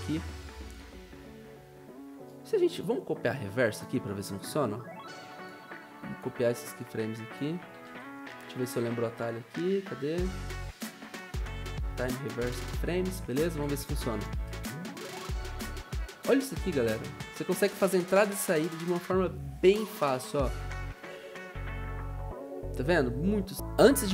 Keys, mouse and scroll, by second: 7.6 ctrl+c, 7.8 ctrl+v, 23.5 Delete.